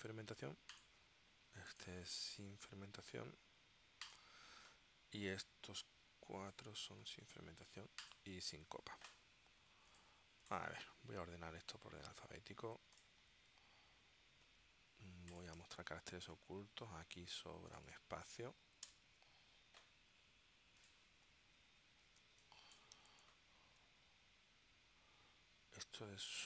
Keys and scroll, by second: 15.7 w, 19.0 Delete, 22.4 space, 23.2 super+Tab.